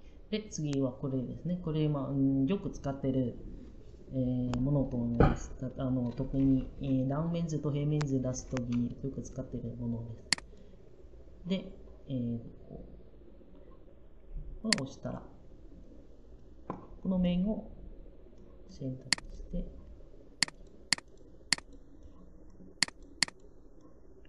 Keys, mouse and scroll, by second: 0.1 middle click, 0.1 typing.